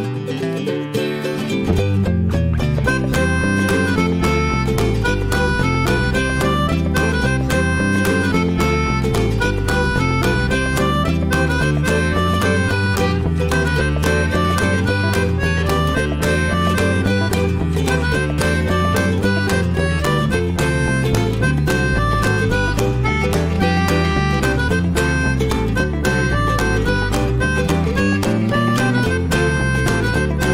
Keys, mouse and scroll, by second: 0.7-1.2 shift+middle drag, 2.0 shift+middle click, 2.9 ctrl+shift+x, 6.8 scroll up 1, 7.3-10.3 shift+middle drag, 11.5-12.1 middle drag, 12.1-12.8 scroll up 2, 12.4 shift+middle drag, 12.8-14.2 scroll down 1, 14.2-14.7 scroll down 1, 14.7 shift+scroll up 1, 14.8-15.5 shift+middle drag, 17.4-18.4 shift+right drag, 18.4 alt+middle click, 19.6 ctrl+shift+x, 24.6-26.5 middle drag, 26.5 scroll down 1, 26.8-28.1 middle drag, 28.1 scroll down 1, 28.4 alt+middle drag, 28.7 alt+middle click, 30.0-30.5 middle drag.